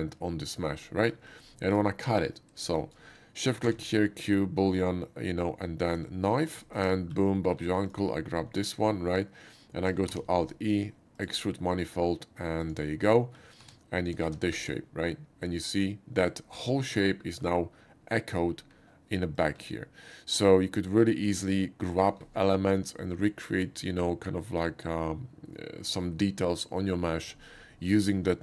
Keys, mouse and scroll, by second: 0.5 click, 0.9 middle click, 1.3 middle click, 1.5 shift+middle click, 1.9 shift+middle click, 3.6 q, 5.9 click, 6.9 Tab, 7.4 middle click, 7.9 click, 8.4 middle click, 10.2 alt+e, 11.2-12.6 drag, 13.1 middle click, 13.7 Tab, 14.3 shift+2, 14.5-16.2 middle drag, 17.1 middle click, 19.4 click, 19.6 q, 21.3 click, 22.0 click.